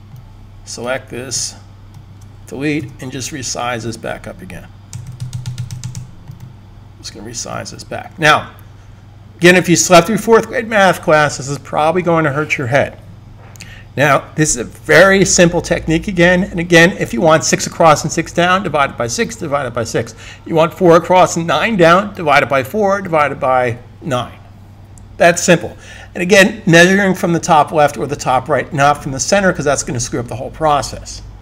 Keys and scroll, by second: 4.8 Escape, 5.0 Escape, 5.1 Escape, 5.2 Escape, 5.3 Escape, 5.5 Escape, 5.6 Escape, 5.7 Escape, 5.8 Escape.